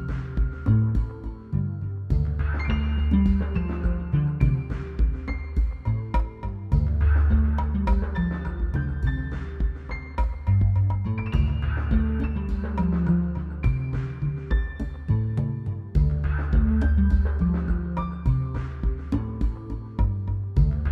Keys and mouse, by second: 0.2 z, 0.7 c, 0.9 ctrl+KP_Add, 1.0 ctrl+KP_Add, 1.8 z, 3.9 a, 4.0 ctrl+s, 5.0 a, 6.9-8.2 middle drag, 9.6 ctrl+s, 11.5 click, 11.7 click, 12.4 ctrl+s, 13.1-14.8 typing, 15.6 ctrl+z, 16.1 a, 16.6 ctrl+z, 16.9 ctrl+z, 17.4-18.7 typing, 18.5 middle drag, 19.1 click, 19.8 a, 20.2 click.